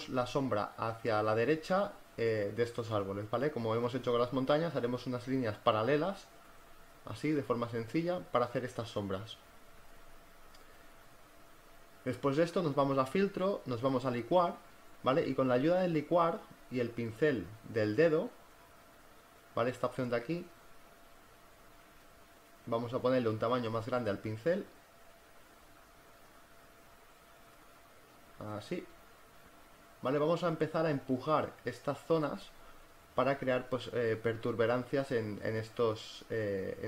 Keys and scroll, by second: 1.2 ctrl+z, 2.0 [, 8.8 space, 9.7 space, 17.4 space, 23.2-24.2 typing, 26.4-27.4 typing.